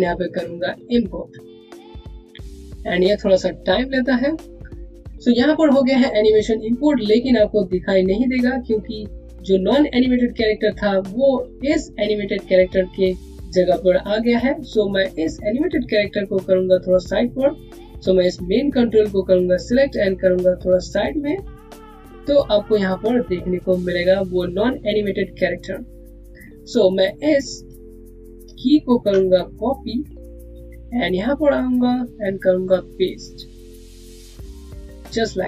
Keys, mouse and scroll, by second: 15.7 click, 20.1 click, 28.4 click, 29.2 right click, 30.1 click, 31.9 right click, 33.6 click.